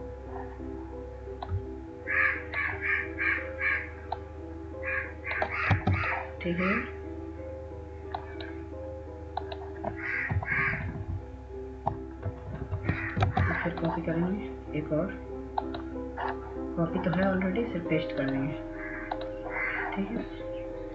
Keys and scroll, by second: 6.2 Up, 6.2 ctrl+space, 11.2 Up, 11.6-12.3 Up, 12.7 Right, 12.9 Right, 13.1 Right, 13.7 ctrl+space.